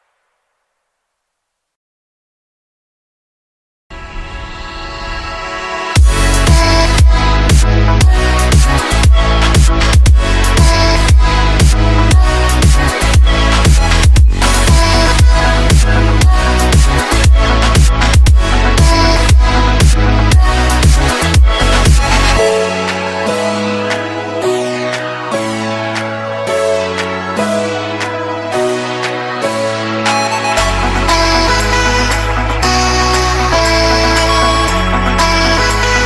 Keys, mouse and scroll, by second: 1.8 F10, 2.5-6.7 drag, 20.0-25.8 typing, 27.2-30.6 typing, 32.5 shift+d, 34.3 click.